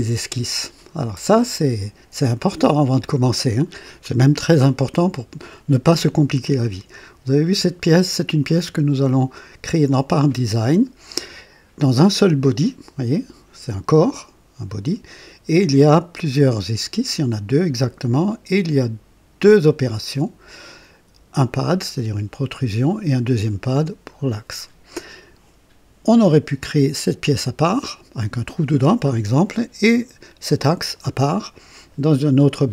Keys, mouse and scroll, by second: 1.5-5.8 drag, 6.9-8.3 drag, 8.5 click, 11.8 click, 16.5 click, 17.8 click, 19.6 click.